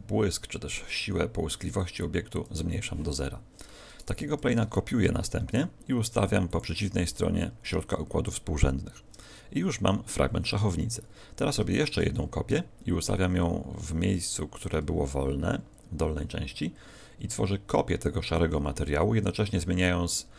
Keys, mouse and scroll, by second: 1.7 click, 4.4 shift+d, 6.5 ctrl+click, 11.7 shift+d, 14.6 ctrl+click.